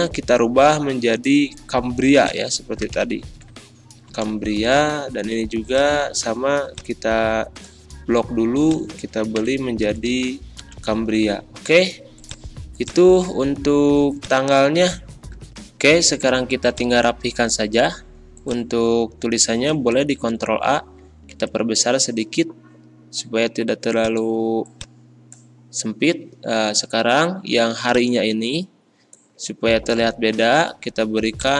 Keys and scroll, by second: 2.8 c, 2.9 a, 3.2 m, 4.0 Return, 9.2 c, 9.3 a, 9.8 m, 10.6 Return, 19.9 ctrl+a, 21.3 ctrl+].